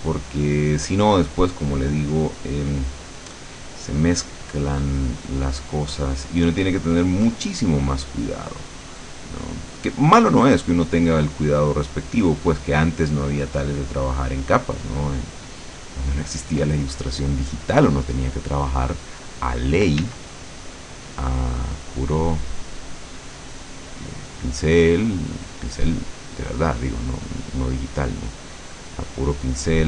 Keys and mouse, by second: 4.8-7.8 drag, 7.9-11.0 drag, 11.5-15.8 drag, 16.1 click, 20.1 d, 20.5-24.6 drag.